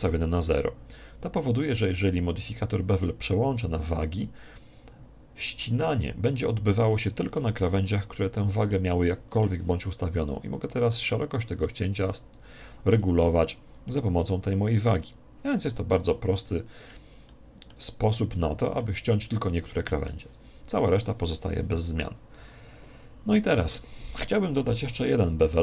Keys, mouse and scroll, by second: 3.4 click, 6.3-9.0 middle drag, 10.4 click, 16.0-20.7 middle drag, 25.1 Tab.